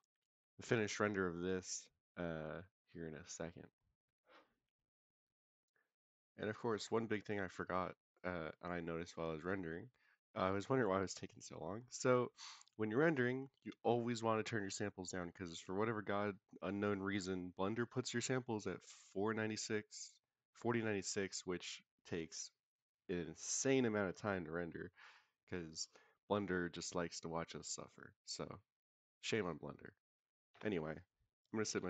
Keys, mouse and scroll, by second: 8.1 click, 8.5 click, 10.3 click, 10.7 click, 12.0-13.6 scroll down 1, 15.6-31.8 drag.